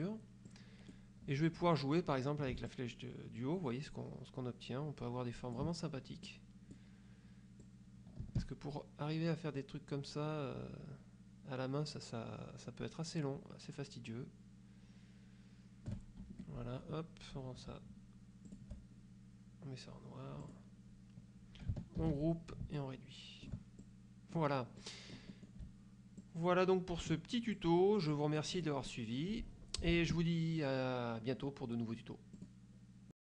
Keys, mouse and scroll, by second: 0.0 click, 0.6 click, 2.8-5.8 ctrl+shift+drag, 6.4 click, 7.7-16.2 drag, 16.4 ctrl+shift+F1, 18.6 shift+click, 20.6 click, 22.1 ctrl+g, 22.9 ctrl+click, 23.9 ctrl+click, 24.9 click, 26.3-27.4 ctrl+drag, 27.6-29.0 ctrl+drag, 29.0 middle click, 32.5 click, 33.2 click.